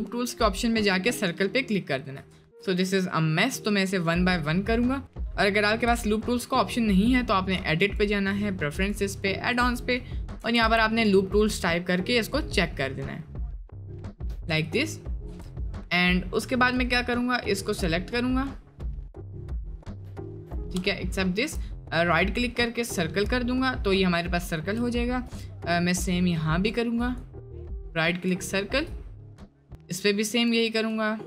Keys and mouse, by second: 2.3 ctrl+z, 5.9 Tab, 7.0-8.3 drag, 14.8 click, 15.3 Tab, 16.7 click, 17.6 click, 18.9 click, 20.5 ctrl+click, 20.8 shift+middle click, 21.9-23.0 drag, 25.9 click, 27.1 click, 28.4 shift+middle click, 29.6 click, 30.7-31.2 drag.